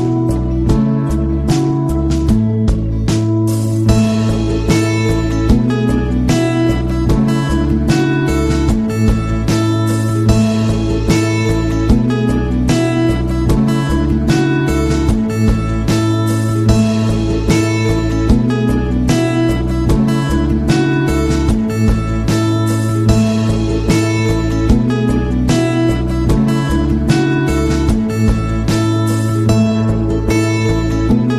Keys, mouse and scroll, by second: 4.1 click, 5.2 click, 6.1-11.3 typing, 8.9 Tab, 12.6-13.6 typing, 13.8 KP_Subtract, 14.0 KP_Enter, 19.2-20.9 drag, 21.6 click, 23.0 click, 24.3 click, 25.4-27.4 typing.